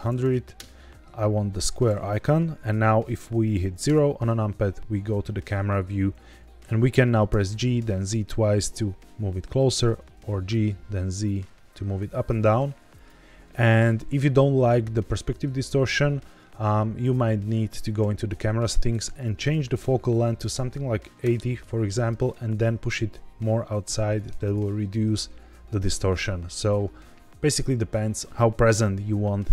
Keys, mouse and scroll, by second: 0.0 KP_0, 3.8 KP_0, 4.9-6.1 scroll down 3, 6.1-7.7 typing, 9.6 click, 9.8 g, 10.1 z, 12.8 click, 16.9 click, 19.0-21.1 drag, 22.0 g, 22.2 z, 22.4 z, 24.4 click.